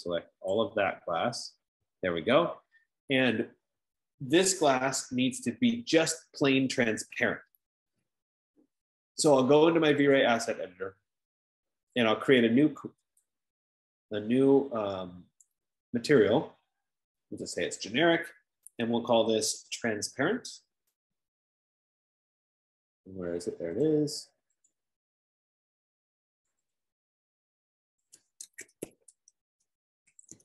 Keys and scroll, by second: 28.4 ctrl+a, 28.9-30.4 typing.